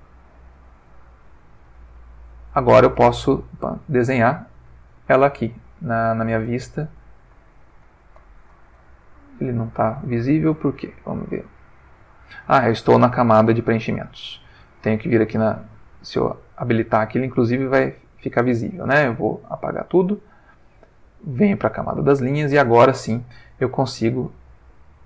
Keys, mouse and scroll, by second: 0.3 click, 3.0 click, 3.1 middle click, 5.4 click, 6.5 click, 7.3-8.5 drag, 9.2 Escape, 11.3 click, 13.7 click, 16.0 click, 19.1 x, 19.5 click, 21.8 click, 24.0-25.0 drag.